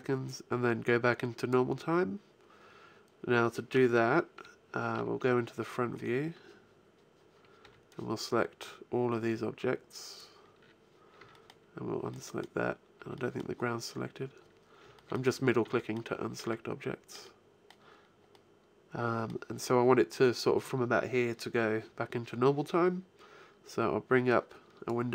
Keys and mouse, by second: 3.6 KP_1, 4.2 KP_5, 4.8 KP_5, 5.8 middle click, 7.4 b, 11.0 b, 11.9-14.5 middle drag, 12.8 b, 14.7 b, 15.4 b, 16.4-20.0 middle drag, 24.2 click.